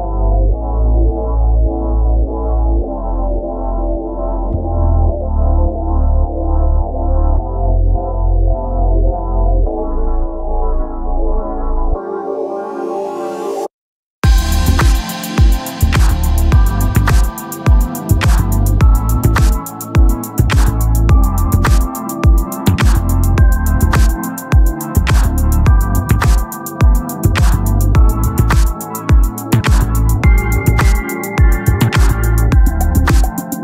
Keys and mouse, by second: 3.3 click, 8.7 click, 17.8 click, 19.8 click, 23.9 click, 31.6 click.